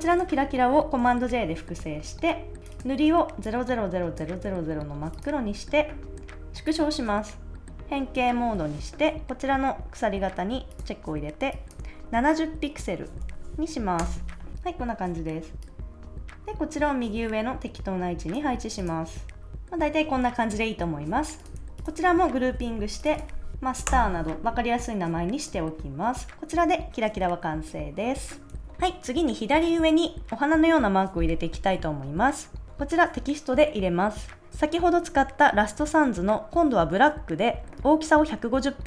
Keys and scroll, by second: 1.2 super+j, 12.8-13.6 typing, 13.9 Return, 19.1 super+s, 22.4 super+g, 22.6 space, 23.4 r, 23.8 Return, 28.5 super+s.